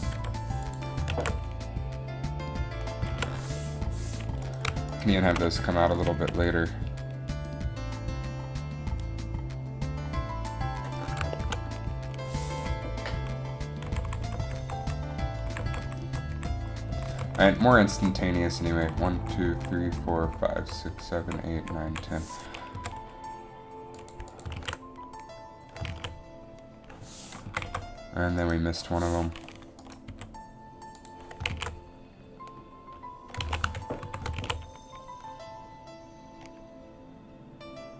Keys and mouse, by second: 0.3 i, 1.2 alt+a, 3.3 alt+a, 4.8-6.4 right drag, 6.4 a, 14.0 Left, 14.2 Left, 14.4 Left, 14.6 Left, 14.8 Left, 14.9 Left, 15.6 Left, 15.8 Left, 16.0 Left, 16.2 Left, 16.5 Left, 17.1 Right, 17.2 Right, 17.4 Right, 17.7 Down, 18.1 Up, 19.1 Left, 19.3 Left, 19.7 Left, 20.0 Left, 20.4 Left, 20.7 Left, 21.0 Left, 21.4 Left, 21.7 Left, 22.0 Left, 22.8 g, 22.9 g, 24.7 alt+a, 26.2 alt+a, 27.6 Down, 27.8 Down, 28.6 right click, 30.2 g, 31.6 alt+a, 33.6 alt+a, 34.2 shift+Left, 34.5 alt+a.